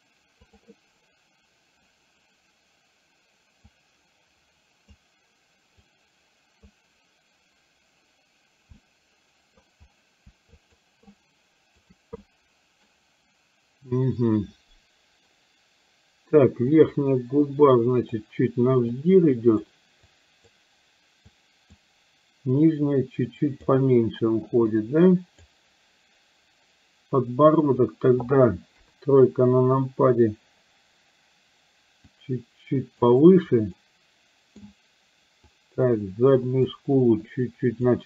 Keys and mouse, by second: 0.5 click, 3.7-5.0 drag, 6.0 click, 8.9 middle click, 10.6 shift+click, 11.1 shift+click, 12.2 middle click, 16.7-18.2 drag, 19.1 click, 20.2 click, 21.4 click, 22.6-23.6 drag, 24.5-25.5 drag, 28.9 KP_3, 32.2 click, 33.7-34.7 middle drag, 35.5-36.7 drag, 37.4 click.